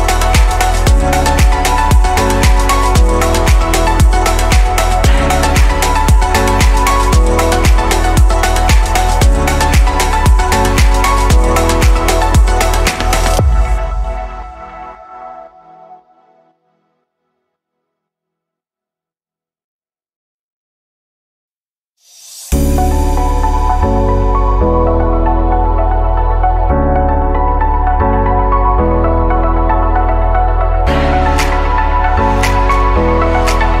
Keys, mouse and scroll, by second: 0.1-0.5 drag, 0.5-0.9 scroll down 2, 1.2-8.6 middle drag, 14.1-14.5 drag, 16.9 click, 20.0 click, 24.3 click, 27.4-29.2 right drag, 29.2 click, 33.3-33.8 scroll down 2.